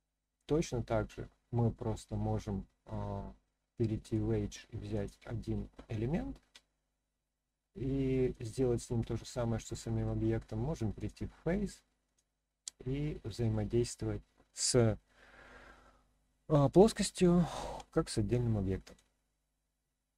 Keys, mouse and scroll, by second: 1.7-2.9 middle drag, 4.0 click, 4.9 click, 6.5 r, 8.3 click, 8.8-10.0 middle drag, 11.0 click, 12.0 click, 12.6-13.5 middle drag, 17.7 r, 18.8 click, 19.3-20.1 middle drag.